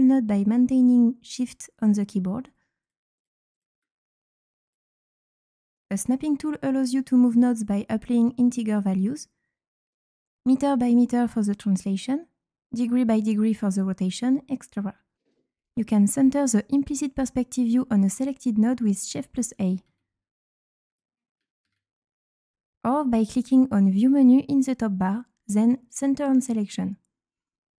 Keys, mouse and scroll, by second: 1.7 click, 2.5 ctrl+click, 2.8 ctrl+click, 3.1 ctrl+click, 3.5 ctrl+click, 4.6 click, 5.7 click, 6.7 click, 7.4-9.3 drag, 9.8 click, 15.1 click, 15.6 click, 16.3-17.2 drag, 17.5-17.9 right drag, 18.4 click, 19.7 shift+a, 20.9 click, 21.6 shift+a, 23.1 click, 24.6 click, 25.6 click.